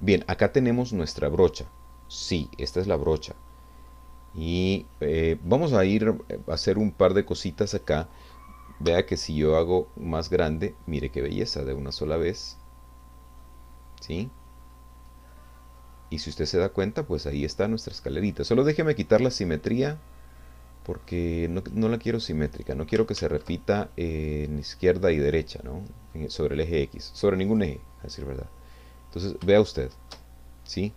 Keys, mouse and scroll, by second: 3.9-4.3 scroll up 1, 4.8 scroll down 1, 5.6-6.8 scroll down 1, 8.8 f, 11.4 click, 12.5 click, 13.4 middle click, 14.6-14.9 scroll up 2, 15.3 middle click, 16.2 middle click, 17.3 middle click, 20.3-21.1 scroll down 2, 21.1 click, 22.5 click, 23.4 ctrl+z, 25.1-26.3 middle drag, 27.5 click, 28.1 middle click, 29.1 scroll up 1, 29.5 shift+click.